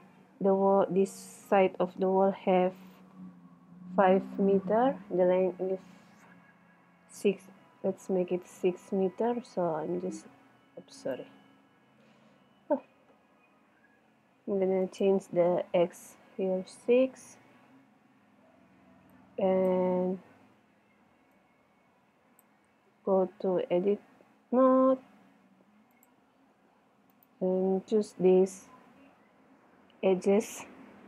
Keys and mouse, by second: 12.1 n, 14.9 click, 15.6-16.7 right drag, 16.7 middle click, 19.3 click, 20.4 middle click, 21.4-22.9 middle drag, 22.9 Tab, 23.1 middle click, 24.8 ctrl+Tab, 28.4 click.